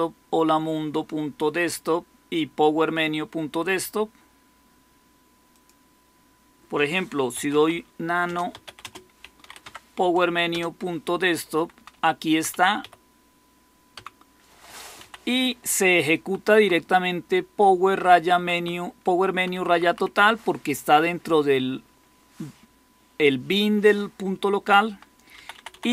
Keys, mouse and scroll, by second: 7.0-9.8 typing, 10.4 Return, 11.5 Down, 11.7 Down, 11.9 Down, 12.2 Down, 12.5 Down, 12.7 Up, 13.9 Down, 14.9 Down, 15.5 Right, 16.0 Right, 16.1 Right, 16.4 Right, 16.5 Right, 16.8 Right, 17.9 Right, 18.1 Right, 18.3 Right, 18.5 Right, 19.6 Right, 20.0 Right, 24.8 Down, 25.3 Left, 25.5 Left, 25.6 Left, 25.8 Left.